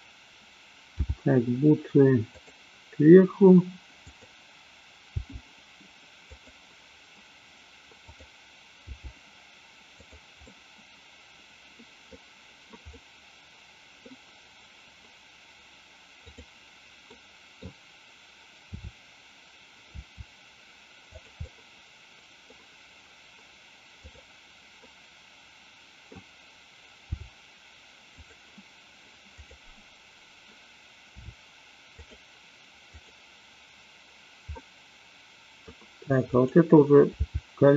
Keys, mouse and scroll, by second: 0.9 g, 2.3 click, 4.0 click, 5.1 g, 6.3 click, 8.9 g, 10.0 click, 10.4-12.0 middle drag, 12.9 scroll up 1, 13.0-14.1 middle drag, 16.3 click, 17.0-17.5 middle drag, 18.6 r, 19.9 r, 21.1 click, 21.4-22.5 middle drag, 24.9-26.3 middle drag, 27.1 g, 28.3 click, 31.1 r, 32.0 click, 32.9 click, 34.6-35.6 middle drag, 36.3 click, 37.1 g.